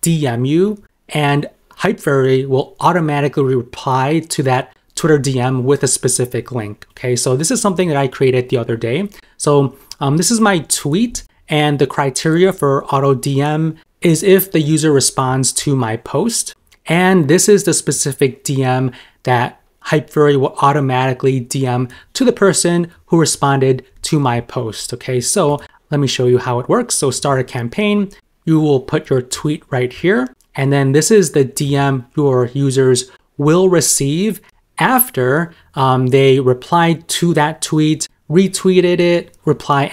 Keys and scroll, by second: 10.6 super+m, 14.7 super+m, 23.0 super+m.